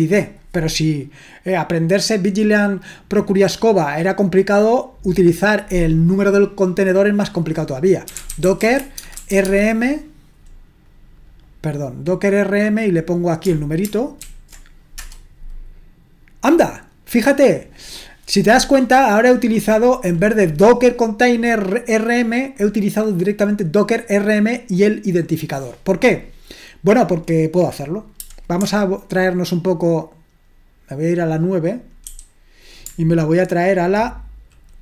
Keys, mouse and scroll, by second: 7.9-9.8 typing, 11.4 click, 12.8-13.8 drag, 14.2 ctrl+alt+v, 15.0 Return, 32.1 super+9.